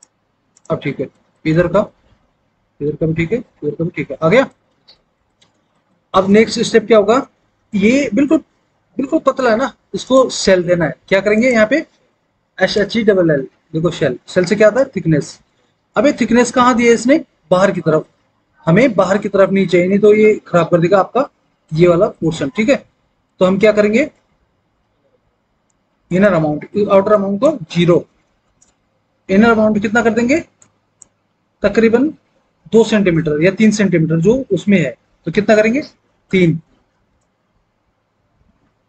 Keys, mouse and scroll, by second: 12.5 typing, 28.0 KP_0, 28.3 Return, 36.2 KP_3, 37.0 Return.